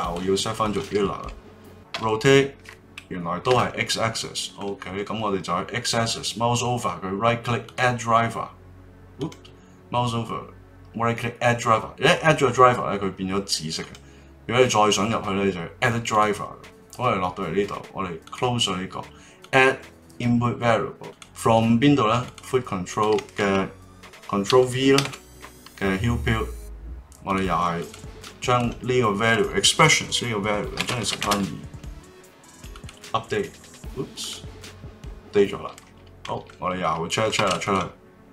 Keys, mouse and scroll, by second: 0.0-1.9 drag, 1.9 r, 4.2-5.8 middle drag, 5.8-8.8 right drag, 9.2-12.2 right drag, 13.8-16.9 right drag, 36.2-37.4 middle drag, 37.4 ctrl+Tab, 37.6 click.